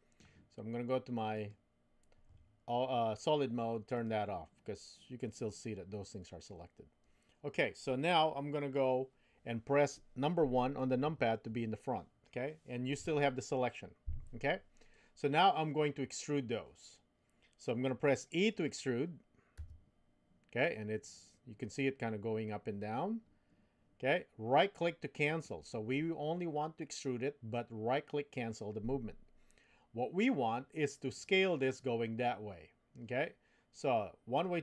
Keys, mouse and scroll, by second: 1.3 click, 4.0-11.0 drag, 11.0 KP_1, 19.6 e.